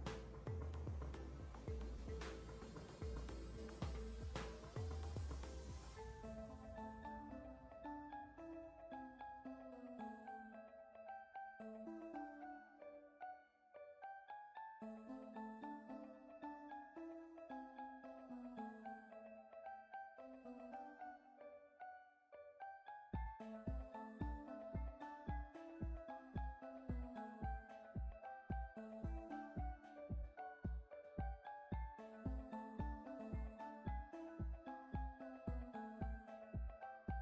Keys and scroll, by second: 2.2 x, 4.8 z, 27.4 KP_2, 28.0 Return, 30.8 z.